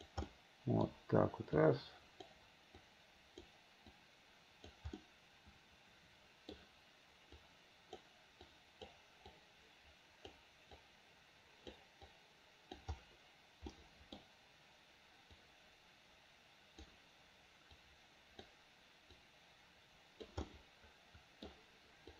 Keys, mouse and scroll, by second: 0.3 middle click, 1.6 click, 2.8 click, 4.0 click, 5.1-6.6 middle drag, 7.4 click, 8.5 click, 9.4-10.4 drag, 10.8-11.8 drag, 12.1 click, 13.8 middle click, 15.4-16.9 drag, 17.8 click, 19.2-20.3 drag, 20.5-21.5 middle drag.